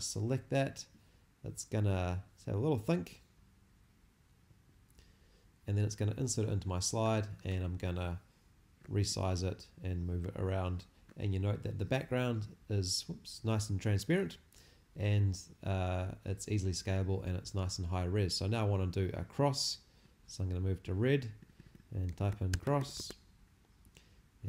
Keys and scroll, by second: 21.8-23.3 typing.